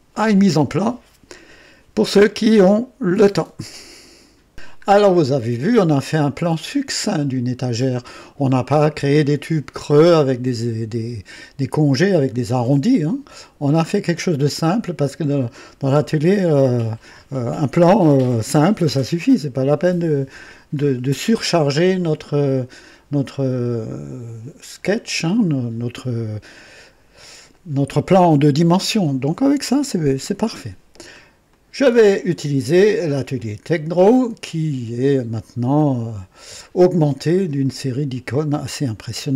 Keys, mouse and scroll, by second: 4.8-5.1 scroll up 1, 5.6-8.1 drag, 13.8 scroll down 1, 14.5-15.4 drag, 18.5-19.8 drag, 20.7-21.0 scroll up 2, 21.4-22.2 right drag, 22.3-22.7 scroll down 2, 23.5-24.4 drag, 31.4 click, 33.3 click, 38.7 scroll down 2.